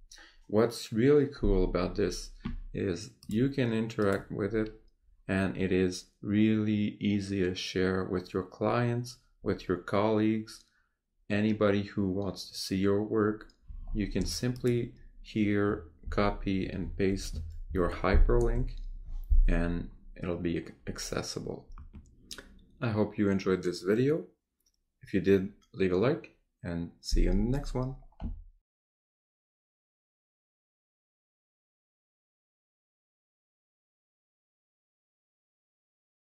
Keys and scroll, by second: 16.0 ctrl+c, 17.1 ctrl+t, 17.7 ctrl+v.